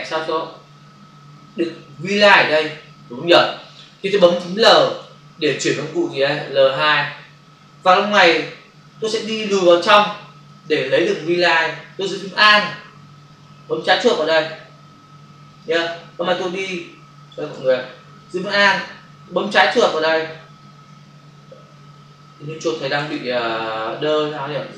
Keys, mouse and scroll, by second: 8.7 space, 9.2 ctrl+click, 15.8 click, 17.5 ctrl+alt+z, 20.9 click, 23.0 ctrl+alt+z.